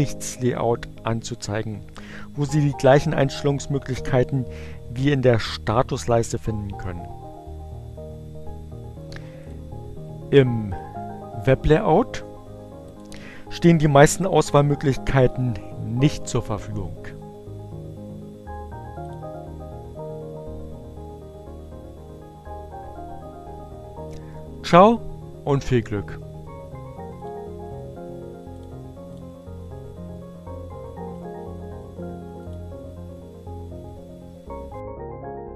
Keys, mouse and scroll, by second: 9.1 click, 10.3 click, 11.9-12.9 drag, 15.8 click, 17.7 click, 25.0-27.1 drag, 28.3 click, 28.8 click, 30.4 right click, 32.2 click.